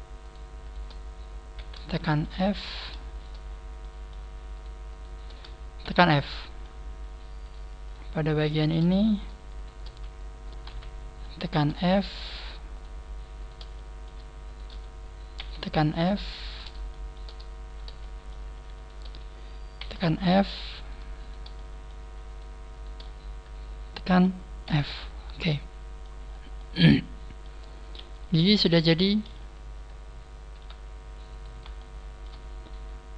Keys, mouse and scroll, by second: 0.2 shift+right click, 0.6 shift+right click, 1.5 f, 1.9 shift+middle click, 2.6 right click, 3.0 shift+right click, 3.4 scroll down 5, 3.7 shift+middle click, 4.5 shift+right click, 4.9 shift+right click, 5.8 f, 6.0 middle click, 6.8 scroll up 2, 7.4 right click, 7.4 scroll up 1, 7.8 shift+right click, 8.5 shift+right click, 8.8 middle click, 9.5 shift+right click, 10.6 f, 11.1 shift+middle click, 12.1 shift+middle click, 12.1 right click, 12.7 shift+right click, 13.3 shift+right click, 13.6 middle click, 14.4 shift+right click, 15.3 f, 15.9 shift+right click, 16.3 shift+right click, 16.8 shift+middle click, 17.6 shift+right click, 18.7 shift+middle click, 18.7 shift+right click, 19.7 f, 20.0 middle click, 20.7 right click, 20.7 f, 21.1 shift+right click, 21.5 middle click, 21.9 f, 22.2 shift+right click, 22.7 shift+right click, 23.0 middle click, 24.6 f, 25.0 scroll down 5, 25.2 Tab, 25.4 middle click, 26.2-26.7 scroll down 2, 26.5 middle click, 28.0 KP_3, 28.7 scroll down 2, 29.2-29.9 scroll up 9, 30.6 Tab, 30.6 scroll up 1, 31.2 right click, 31.2 scroll up 1, 31.7 shift+middle click.